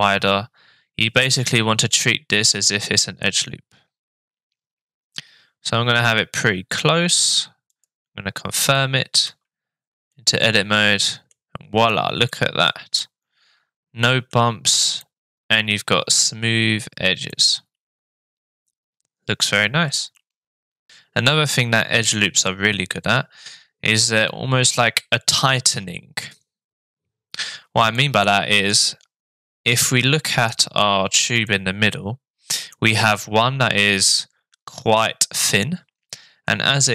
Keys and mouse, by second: 9.2 Tab, 10.1-11.3 middle drag, 12.3-12.7 shift+middle drag, 13.0-14.3 middle drag, 15.1-16.2 middle drag, 17.4-19.5 middle drag, 20.0-20.9 shift+middle drag, 20.9 Tab, 25.7 Tab, 27.9 shift+middle click, 29.7 middle click, 30.8 shift+middle click, 31.5-32.7 middle drag, 35.6 middle click.